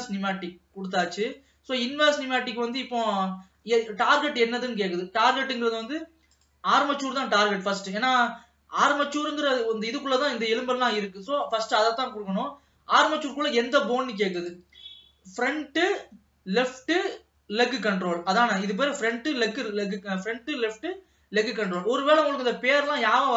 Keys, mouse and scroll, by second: 0.0-1.6 drag, 1.6-6.4 middle drag, 6.4-9.5 drag, 14.4-17.5 drag.